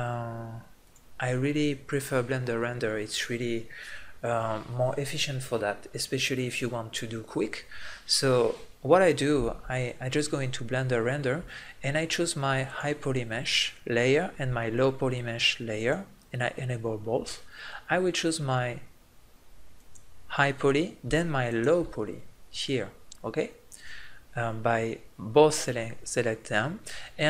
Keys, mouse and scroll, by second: 0.2-4.2 drag, 12.7-14.8 middle drag, 15.7-20.0 middle drag, 23.4-27.2 middle drag.